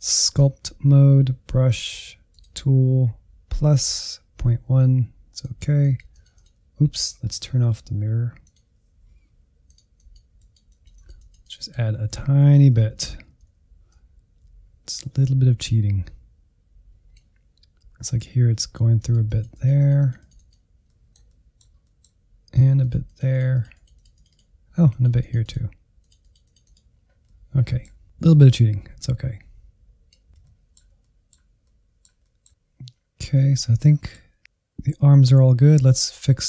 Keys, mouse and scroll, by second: 5.4-7.3 drag, 7.3 ctrl+z, 7.5 ctrl+z, 8.4 click, 9.3 f, 9.9-12.4 drag, 12.4 Right, 12.9 Right, 13.1 Right, 13.2 Left, 13.4 Left, 13.9-20.8 drag, 20.8-22.8 middle drag, 22.8-26.4 drag, 26.4 scroll down 3, 26.5 middle click, 27.3 middle click, 27.8-29.0 drag, 29.0 middle click, 29.8 click, 30.2 middle click, 30.9 click, 31.3 scroll down 2, 31.4-32.8 shift+middle drag, 32.8 scroll up 1, 33.0 middle click, 33.3-34.1 scroll down 5, 34.1 shift+middle click, 34.9-36.4 drag.